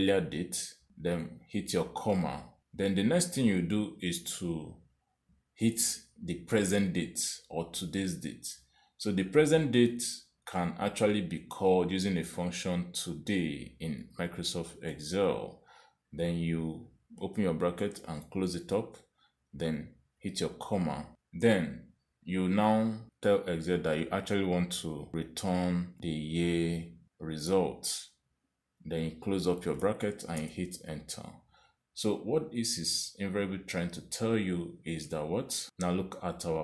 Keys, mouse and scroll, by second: 1.5 ,, 13.7-16.0 typing, 18.2 shift+9, 19.1 shift+0, 21.1 ,, 26.0 shift+', 27.1 y, 28.4 shift+', 30.8 shift+0, 31.4 Return, 34.7 click.